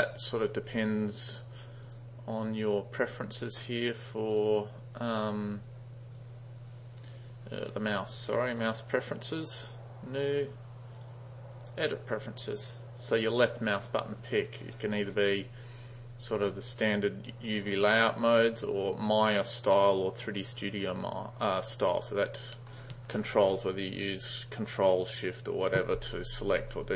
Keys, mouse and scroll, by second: 1.9 click, 6.2 click, 8.1 drag, 8.6 click, 11.0 drag, 11.7 click.